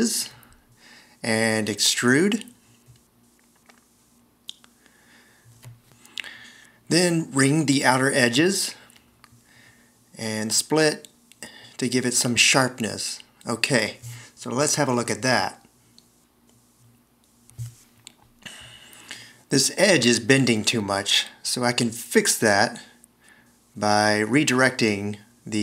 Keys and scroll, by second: 0.0 space, 1.7 d, 9.7 s, 11.1 alt+r, 11.5 shift+x, 15.6 c, 24.0 v.